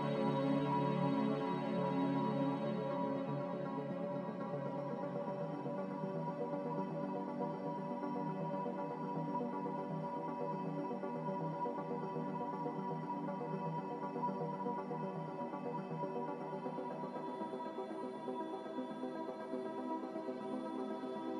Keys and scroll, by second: 4.1-4.4 typing.